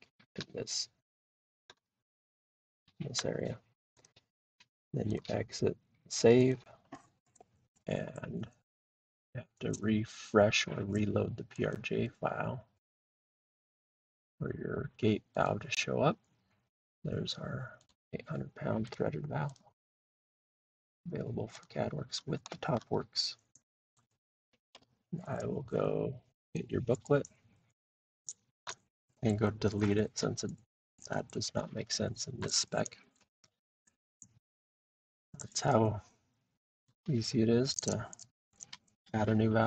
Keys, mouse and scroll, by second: 4.0 click, 5.2 click, 6.5 click, 11.7 click, 13.8 click, 15.5 click, 17.8 click, 19.6 click, 20.1 scroll, 21.6 click, 22.1 scroll, 23.0 middle click, 23.5 middle click, 23.9 click, 24.6 scroll, 24.7 Delete, 26.6 click, 26.6-27.1 scroll, 28.0 scroll up 1, 30.0-31.6 drag, 36.9 click, 38.4-39.6 drag.